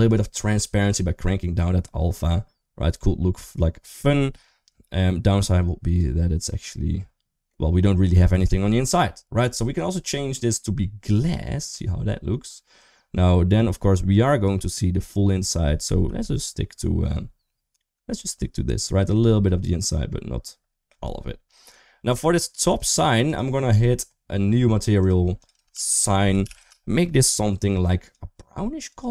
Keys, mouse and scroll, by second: 0.7-5.8 drag, 6.2 middle click, 7.9 middle click, 9.5-10.9 drag, 12.9 middle click, 15.8 ctrl+z, 17.9 middle click, 19.7 middle click, 21.9 click, 22.4 click, 24.8 click, 25.3-26.4 shift+drag, 27.8 click.